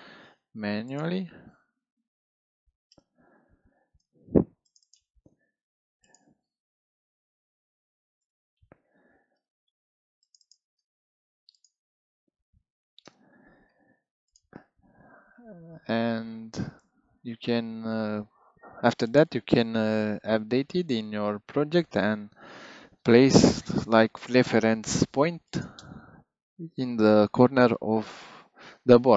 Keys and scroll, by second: 1.8 BackSpace, 1.9 2, 2.8 Return, 7.1 BackSpace, 7.7 3, 8.2 Return, 12.4 BackSpace, 12.7 3, 13.0 Return.